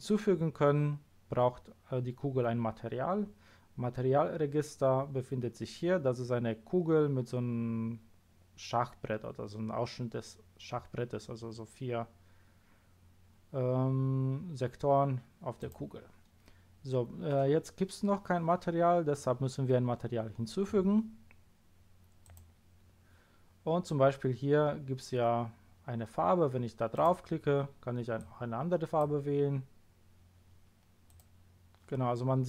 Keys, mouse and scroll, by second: 15.6 click, 22.2 click, 26.9 click, 28.2 click, 31.0 click.